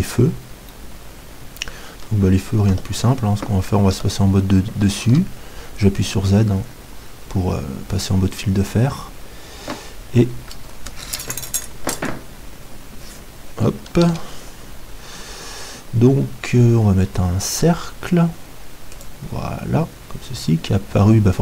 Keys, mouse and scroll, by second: 0.7-2.7 middle drag, 2.7 KP_7, 4.1-7.1 middle drag, 4.1 z, 5.2 shift+a, 14.0 shift+a.